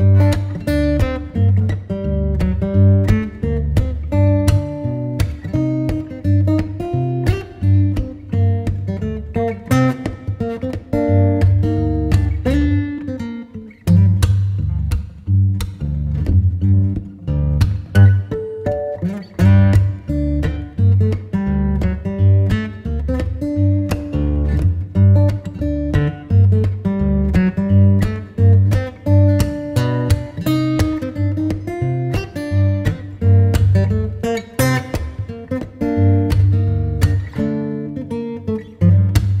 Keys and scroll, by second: 5.0 b, 6.7 x, 12.5 [, 14.0 0, 17.8 6, 18.8 ], 20.5 [, 24.1 v, 25.8 space, 31.5 super+u, 37.6 super+l.